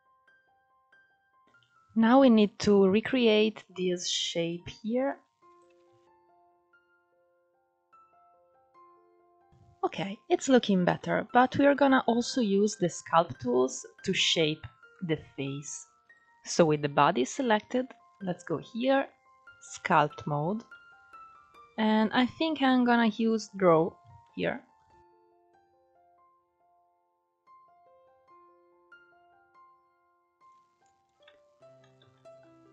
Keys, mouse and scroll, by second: 0.0 scroll down 1, 0.3 shift+middle click, 0.5 ctrl+\, 0.7 ctrl+1, 0.9 click, 1.3-3.6 scroll up 2, 3.6 click, 5.5 ctrl+z, 6.0 click, 6.9 scroll down 6, 7.1 middle click, 7.3 Tab, 7.5 alt+z, 7.6-8.6 middle drag, 9.4 scroll up 1, 9.5-10.2 shift+middle drag, 10.2-10.6 scroll up 2, 10.6-12.6 middle drag, 12.6-13.0 scroll down 3, 13.0-13.4 middle drag, 13.4-14.6 scroll up 3, 14.6-15.7 middle drag, 15.7 click, 16.6-17.8 middle drag, 17.8-20.4 drag, 20.4-23.4 middle drag, 23.9-27.0 middle drag, 28.0 f, 29.3 middle click, 30.2 click, 30.9 middle click, 31.7 ctrl+z.